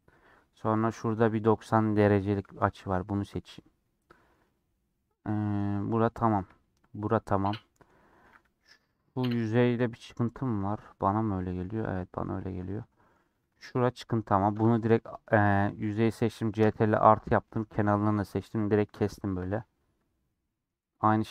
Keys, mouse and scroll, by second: 0.8 click, 1.1 scroll up 2, 1.6-3.4 middle drag, 3.6 scroll down 3, 3.7-5.5 middle drag, 5.5 scroll down 2, 5.8-8.5 shift+middle drag, 8.5 3, 8.9 middle click, 9.2-9.6 scroll up 2, 9.9 middle click, 10.7 scroll up 1, 10.9 middle click, 11.7 scroll down 3, 11.9 middle click, 12.2 scroll up 1, 12.4 scroll down 2, 12.5-13.6 middle drag, 13.6 click, 14.6 ctrl+KP_Add, 15.3 middle click, 15.9 click, 16.7 ctrl+KP_Add, 17.2 middle click, 17.5-18.3 scroll up 2, 18.5-21.3 middle drag.